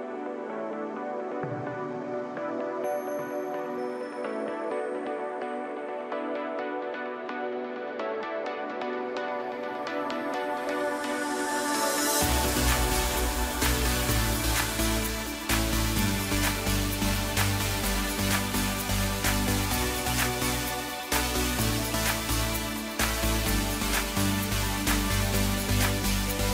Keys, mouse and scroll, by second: 0.6 KP_7, 2.0 g, 6.1-8.7 middle drag, 8.7 KP_1, 9.8 drag, 11.5 KP_3, 12.8 g, 16.1-16.9 middle drag, 16.9 click, 18.3 KP_1, 19.2 KP_3, 19.9-20.9 scroll up 2, 20.9-21.7 scroll up 1, 21.7 s, 22.7-23.5 scroll down 2, 23.5 g, 26.3 g.